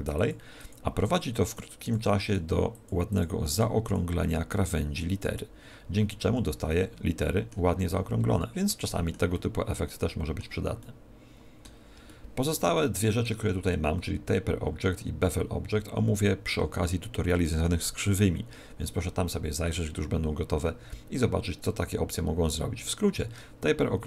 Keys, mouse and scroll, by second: 0.1 click, 1.0 click, 1.4 click, 2.2 click, 2.6 click, 3.8 click, 6.2 z, 6.6 middle click, 7.6-8.5 scroll down 16, 9.2 shift+middle click, 10.8 middle click, 12.0 shift+middle click, 12.7 middle click.